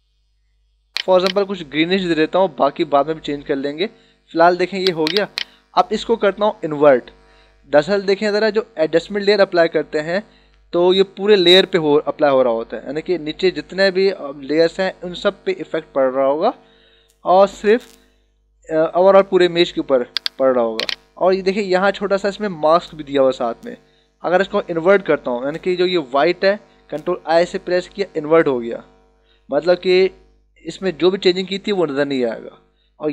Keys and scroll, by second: 27.8 ctrl+i.